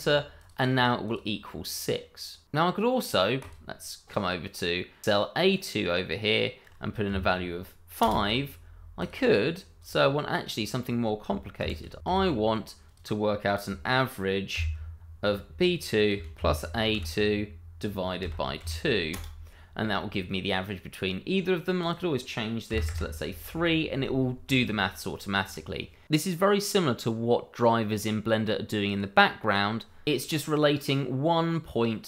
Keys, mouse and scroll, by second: 0.4 click, 3.4 click, 7.8 5, 8.0 Return, 9.0 click, 12.1 shift+9, 12.8 click, 14.5 shift+=, 16.1 a, 16.4 2, 16.9 shift+0, 18.4 /, 18.6 2, 19.1 Return, 21.8 click, 22.7 3, 23.0 Return, 25.4 click, 28.9 click.